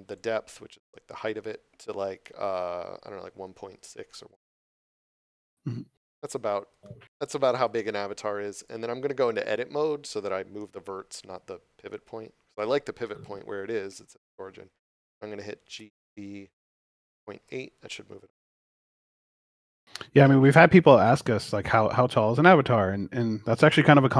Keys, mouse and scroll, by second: 5.4 middle click, 6.0 scroll up 1, 6.7 shift+middle click, 7.4 Tab, 18.3 Return, 19.6 Tab, 20.1 middle click, 20.9 scroll down 1, 21.7 middle click, 23.8 scroll up 1.